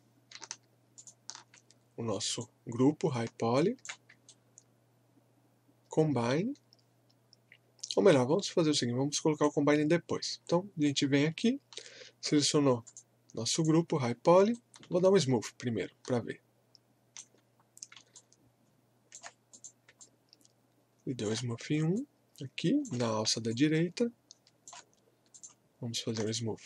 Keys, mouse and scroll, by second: 4.3-12.8 shift+right drag, 12.8 click, 14.5-18.2 shift+right drag, 18.2-19.9 alt+drag, 20.0-21.6 alt+drag, 21.6 scroll up 1, 21.9 alt+click, 23.2 scroll up 1, 23.5-25.3 alt+drag, 26.2-26.6 shift+right drag.